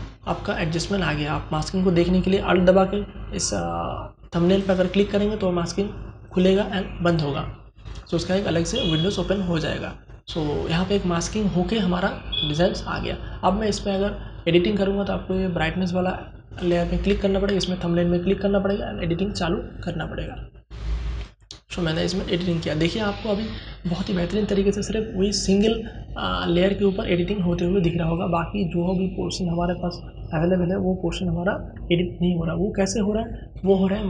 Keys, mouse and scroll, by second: 3.9 alt+click, 19.5-25.7 drag.